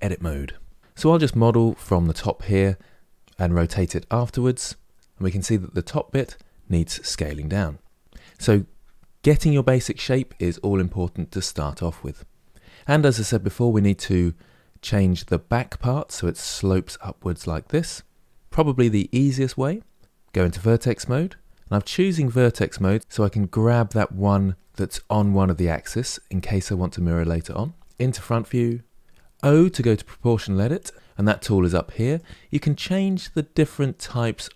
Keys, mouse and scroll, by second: 0.8-2.0 scroll down 1, 5.8 click, 6.9 s, 12.6-15.6 middle drag, 20.0 1, 20.7-22.5 middle drag, 22.5 click, 22.9-27.3 middle drag, 27.8 KP_1, 29.2 o, 31.8-34.5 drag.